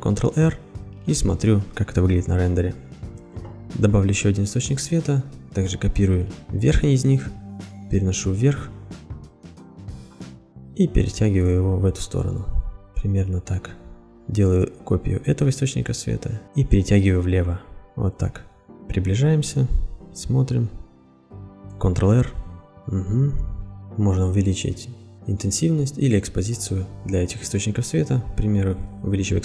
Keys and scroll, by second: 0.1 ctrl+r, 2.8 ctrl+r, 16.4 ctrl+z, 22.4 ctrl+r.